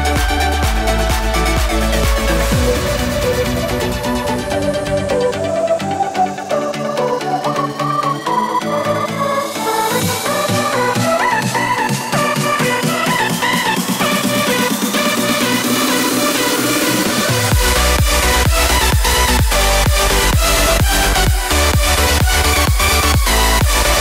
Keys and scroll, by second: 2.6 alt+w.